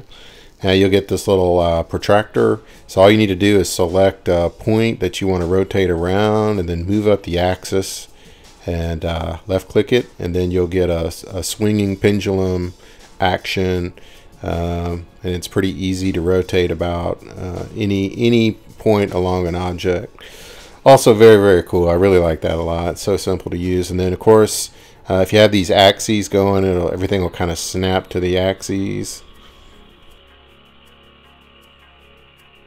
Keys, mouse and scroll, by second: 6.5 click, 11.4 click, 11.9-12.5 scroll, 13.6 Escape, 17.4 middle click, 17.4 scroll down 7, 17.4-18.1 scroll up 9, 18.7-19.3 scroll down 9, 19.3 scroll up 4, 22.9 click, 23.1 scroll, 26.3-27.9 drag, 30.1-32.5 drag.